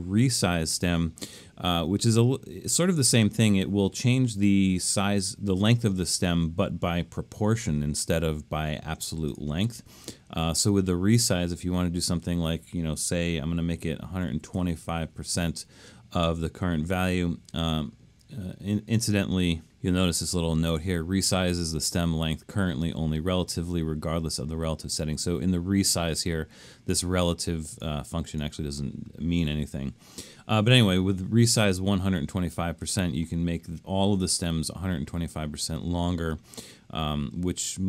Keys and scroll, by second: 13.9-15.1 typing.